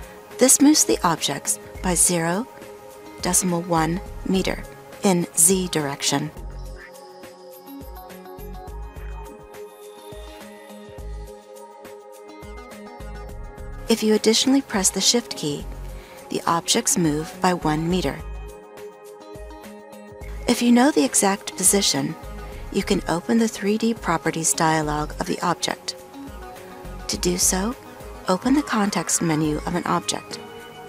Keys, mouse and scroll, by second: 0.1 ctrl+Down, 13.7 ctrl+shift+Up, 17.0 ctrl+shift+Down.